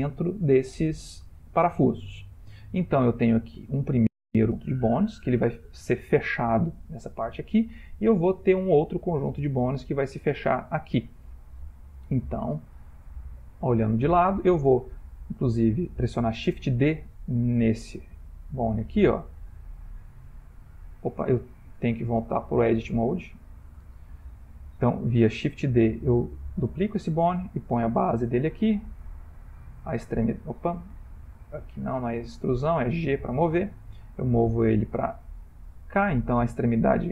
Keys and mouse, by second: 1.5 middle click, 1.9 middle click, 2.0 middle click, 2.6 middle click, 4.5 middle click, 4.8 ctrl+middle click, 7.9 shift+middle click, 13.4 click, 15.3 click, 18.1 shift+d, 21.9 click, 25.5 shift+d, 29.2 click, 29.7 e, 31.2 click, 31.8 x, 32.7 click, 33.5 g.